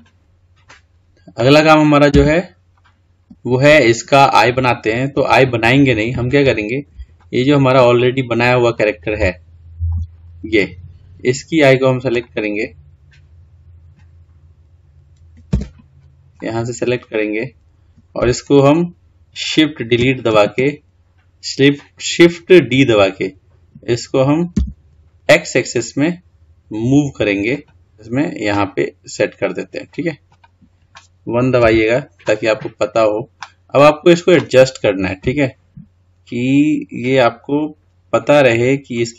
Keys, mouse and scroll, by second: 2.0 Tab, 2.6-3.0 scroll down 3, 3.0-3.6 scroll up 2, 4.7-7.0 scroll down 5, 7.0 shift+middle click, 7.8-8.5 scroll up 3, 8.5-9.0 scroll down 2, 9.0 shift+middle click, 9.9-10.4 scroll up 4, 10.4 scroll down 2, 12.0 click, 13.8-15.4 scroll up 2, 15.4 Tab, 16.2 click, 20.3 shift+d, 27.8 g, 31.4 KP_1, 32.2-32.6 scroll up 2, 32.6-33.4 scroll down 1, 33.4 scroll up 1, 35.0 g.